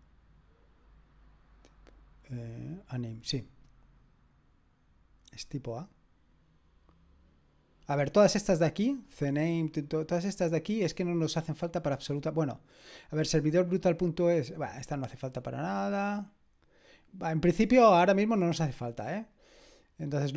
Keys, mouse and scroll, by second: 10.0-10.8 scroll down 2, 16.9 click, 19.4 click, 20.2-20.3 scroll down 2.